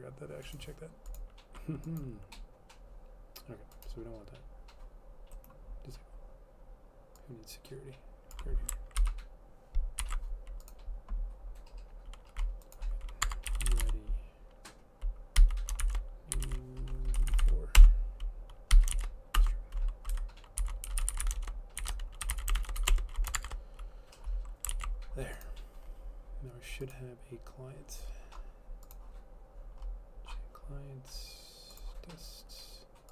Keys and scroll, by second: 9.1 ctrl+/, 10.1 ctrl+s, 13.3 Tab, 13.5-24.0 typing, 20.2 Home, 24.8 ctrl+s, 28.2-28.9 typing.